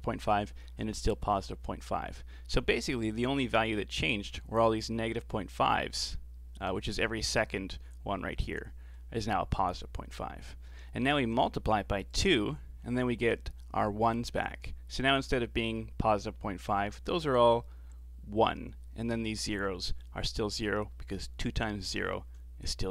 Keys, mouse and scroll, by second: 12.1 ctrl+shift+click.